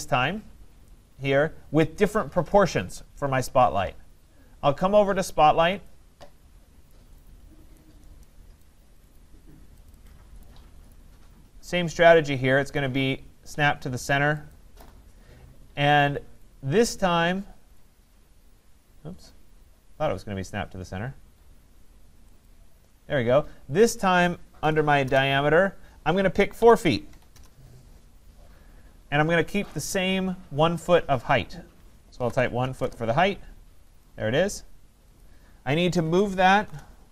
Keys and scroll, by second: 25.0 Return, 32.8 Return, 36.8 Return.